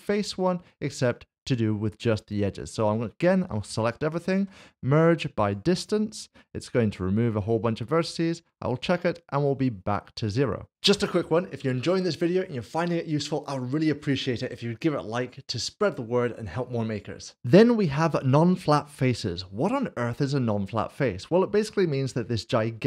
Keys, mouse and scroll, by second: 4.4 typing, 5.4 click, 6.9 Tab, 7.4 click, 17.4 click, 19.1 middle click, 21.6-22.7 scroll down 1, 22.7 Tab.